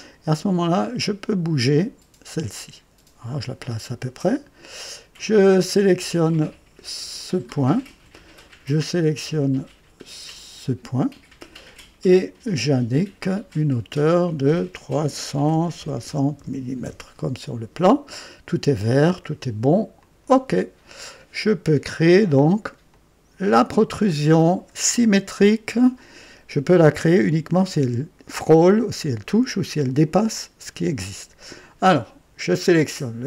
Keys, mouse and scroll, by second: 1.6-4.5 drag, 5.5 click, 7.1 click, 10.3 click, 12.9 click, 15.5 KP_3, 15.7 KP_6, 16.0 KP_0, 16.8 Return, 20.0 click, 20.0 typing, 21.3-21.8 scroll up 1, 22.1-22.8 right drag, 22.9-24.7 drag.